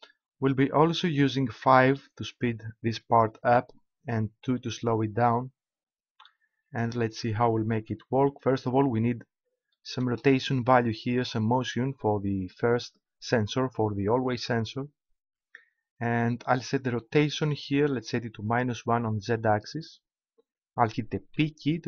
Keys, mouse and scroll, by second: 18.5-20.2 drag, 21.3 p.